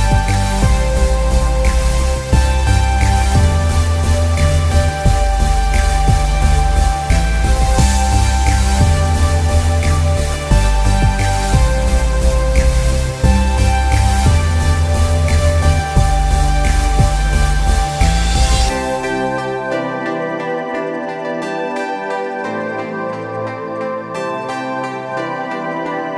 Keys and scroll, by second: 13.5 ctrl+z, 17.4 ctrl+=, 21.5 ctrl+z, 23.9 ctrl+z.